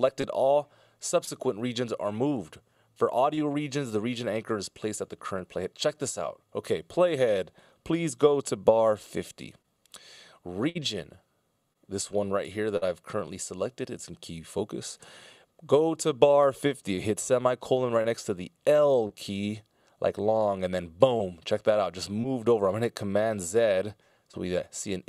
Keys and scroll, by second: 11.7 Return, 12.8 ctrl+alt+super+m, 17.7 i, 23.1 super+z.